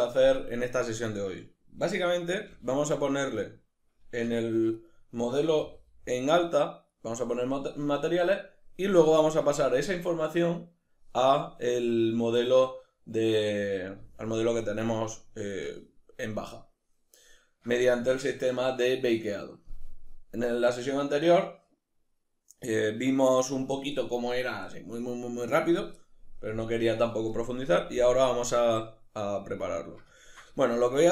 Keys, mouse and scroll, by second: 3.4 right click, 4.2 \, 4.8 right click, 5.6 g, 7.0 right click, 15.6 right click, 17.2-31.1 middle drag.